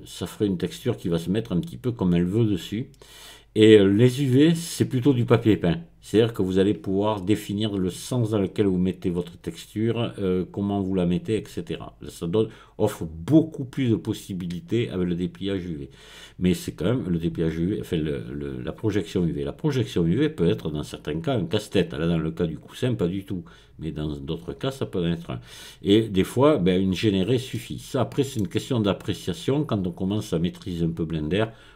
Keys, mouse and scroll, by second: 14.4-16.4 drag, 14.5 right click, 27.5-29.2 middle drag, 29.2-30.4 drag, 30.4-31.7 middle drag.